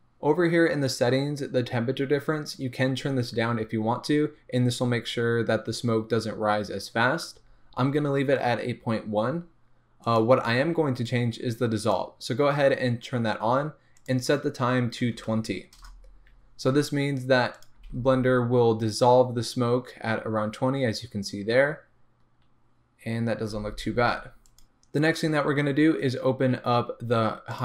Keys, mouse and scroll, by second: 10.0 click, 11.8 click, 14.0-17.7 drag, 15.8 Return, 17.8 space, 17.9 space, 23.5 space, 24.4 click, 25.0-27.5 scroll down 1, 27.5 click.